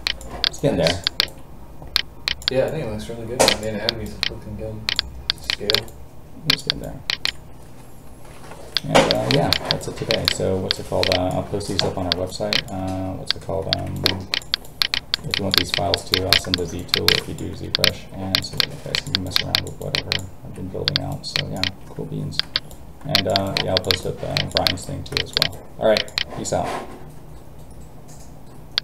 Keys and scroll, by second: 8.3 ctrl+n.